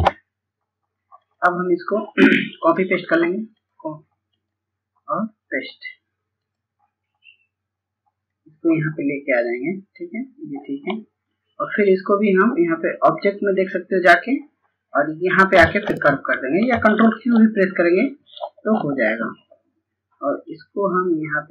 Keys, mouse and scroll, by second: 1.1-10.7 drag, 17.0-21.5 drag.